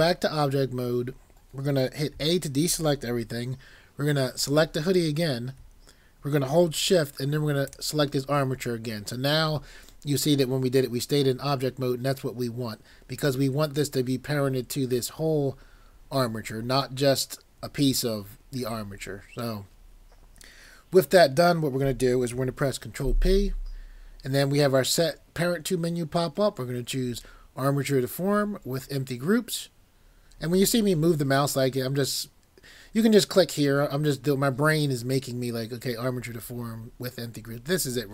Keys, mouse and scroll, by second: 2.1 a, 4.4 click, 23.0 ctrl+p.